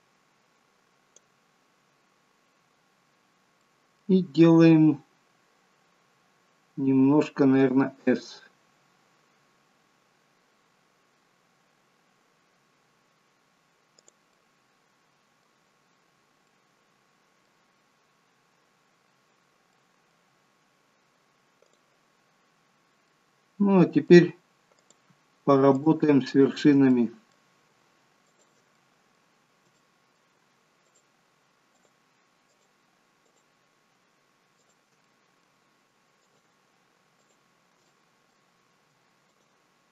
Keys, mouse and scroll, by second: 3.6 middle click, 7.7 s, 14.3 middle click, 15.7-16.5 scroll down 4, 16.5 middle click, 19.4 scroll up 4, 19.8 middle click, 21.7 click, 23.1 middle click, 24.8 click, 25.8 shift+click, 26.4 click, 27.0 middle click, 28.3 shift+click, 28.8 middle click, 29.8 middle click, 30.9 shift+click, 31.8 shift+click, 32.5 shift+click, 33.3 shift+click, 34.6 shift+click, 35.1 middle click, 36.2 shift+click, 37.3 shift+click, 37.9 middle click, 39.3 shift+click.